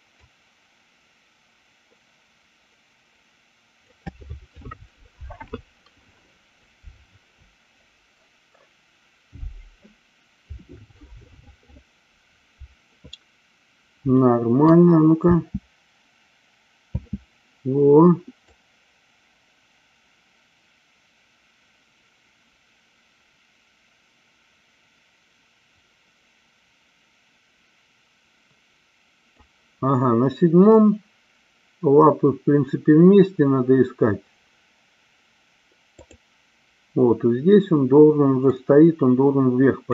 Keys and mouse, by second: 0.1-4.0 drag, 14.1 shift+middle click, 15.2 space, 18.4-29.5 drag, 35.8 click, 38.5-39.8 drag.